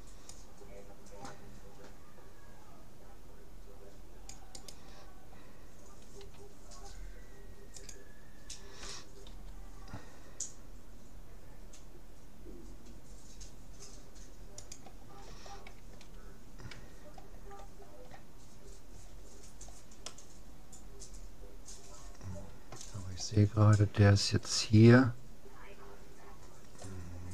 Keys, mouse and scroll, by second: 6.2 s, 9.3 g, 16.8 a, 17.3-19.5 scroll up 1, 19.5-19.9 scroll down 1, 19.9-21.9 middle drag, 26.3-27.3 scroll up 2.